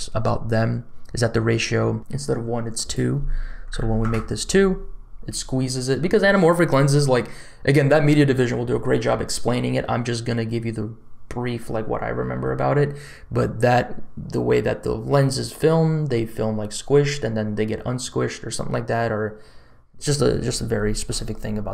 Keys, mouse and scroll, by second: 2.7-4.1 drag.